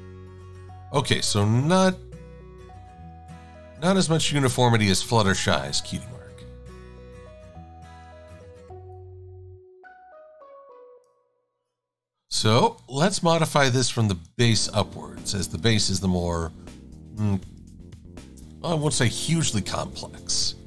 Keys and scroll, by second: 3.4 shift+x, 4.4 shift+super+a, 5.2 shift+x, 13.3 e.